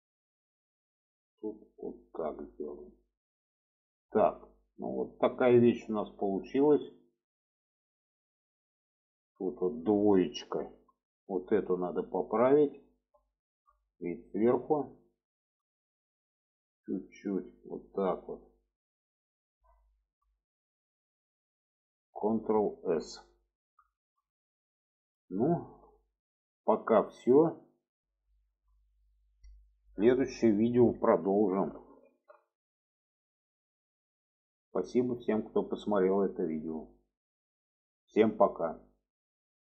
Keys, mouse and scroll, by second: 0.3 click, 1.6-2.9 drag, 3.2 click, 3.9 alt+z, 4.7-6.2 middle drag, 7.1-8.2 middle drag, 8.4-9.7 middle drag, 10.7 2, 11.2 click, 11.6-12.8 middle drag, 13.3-13.6 middle drag, 14.0-14.5 alt+middle drag, 14.9-15.5 alt+middle drag, 16.8 click, 18.8 click, 19.8 shift+middle click, 21.0 middle click, 22.8 ctrl+s, 23.0 middle click, 23.9 shift+middle click, 24.8 shift+middle click, 25.5 shift+middle click, 26.6-26.9 shift+middle drag, 28.3 shift+middle click, 32.0 ctrl+s.